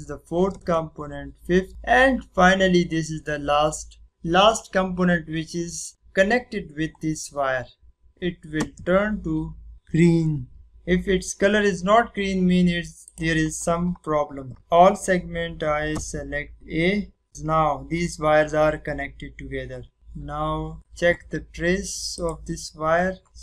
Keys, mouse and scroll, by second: 1.4 space, 10.5 click, 15.3 click, 15.9 a, 19.9 click, 20.7 click.